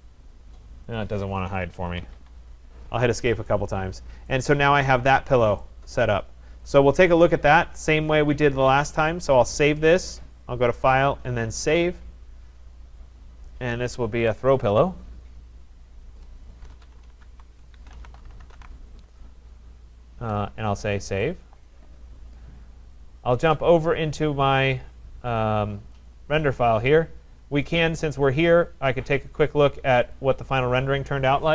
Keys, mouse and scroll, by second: 1.0 click, 1.9 Escape, 2.0 Escape, 2.2 Escape, 2.7 scroll, 2.8 middle click, 2.9 middle click, 4.4 right click, 4.8 middle click, 5.2 middle click, 5.3 middle click, 5.4 middle click, 6.1 right click, 7.2 click, 8.4 scroll, 8.5 click, 10.3 click, 11.8 click, 14.7 click, 16.2 click, 16.4-19.2 typing, 21.2 click, 23.5 click, 26.3 click, 28.5 click, 29.3 click, 30.2 click.